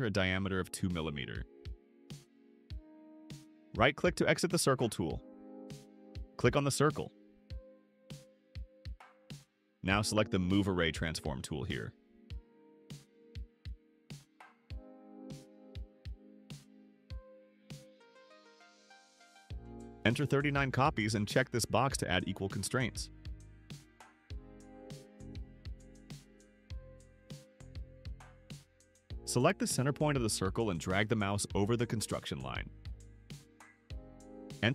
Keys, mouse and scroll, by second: 1.4 2, 2.7 Return, 4.3 right click, 6.8 click, 16.6 click, 21.5 3, 22.1 9, 28.0 click, 30.7 click.